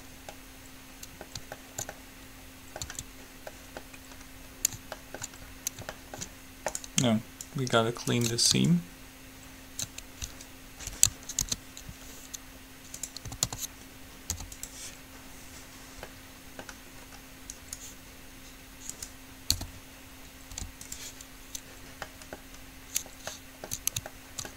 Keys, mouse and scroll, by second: 3.0 Tab, 6.9-8.7 right drag, 7.7-10.7 drag, 11.6 ctrl+e, 13.5 a, 13.7 a, 14.5 u, 16.3 middle click, 17.8-19.1 drag, 19.1 right click, 19.8 p, 20.8 u.